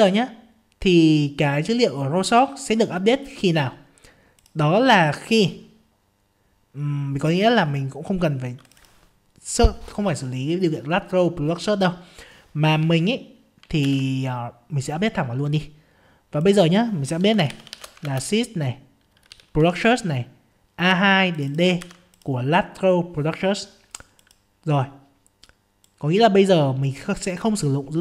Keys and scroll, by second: 13.9 ctrl+c, 14.4 ctrl+c, 18.1 ctrl+space, 21.8 ctrl+v.